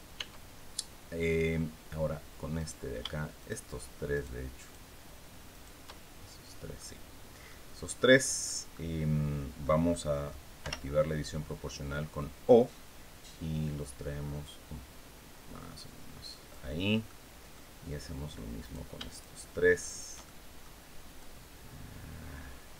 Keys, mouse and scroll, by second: 2.2 right click, 3.1 shift+right click, 3.8 shift+right click, 4.2 shift+right click, 5.2 shift+right click, 5.5-6.6 shift+middle drag, 7.1-8.3 middle drag, 9.6 click, 10.3 o, 11.8-14.0 drag, 14.0-14.4 scroll up 1, 14.9 scroll down 1, 16.7 click, 18.3 right click, 18.8 shift+right click, 19.5 shift+right click, 20.0 shift+middle click, 20.9-22.7 drag.